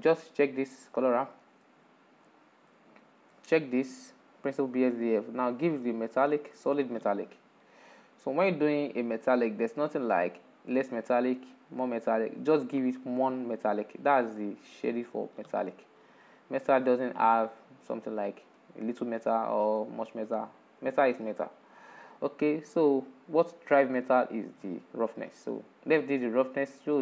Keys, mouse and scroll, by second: 0.2-1.4 drag, 2.2 shift+middle click, 2.9 scroll up 7, 3.3 shift+middle click, 4.1-7.2 drag, 7.2-10.1 middle drag, 10.1-14.2 drag, 14.2-21.8 middle drag, 21.8-23.2 scroll down 11.